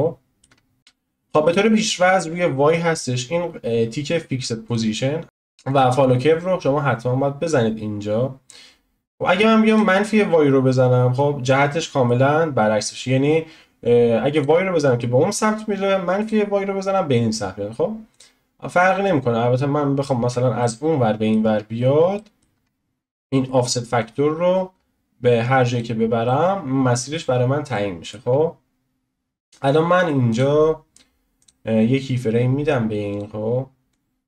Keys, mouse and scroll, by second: 0.8 click, 4.7-11.5 drag, 11.5-14.3 shift+middle drag, 14.3-20.6 drag, 20.6-21.5 shift+middle drag, 21.5-22.2 scroll up 1, 22.2-24.1 shift+middle drag, 24.1-26.3 drag, 26.3-27.3 middle drag, 27.3-27.7 scroll up 2, 27.7-30.3 shift+middle drag, 30.3-34.2 drag.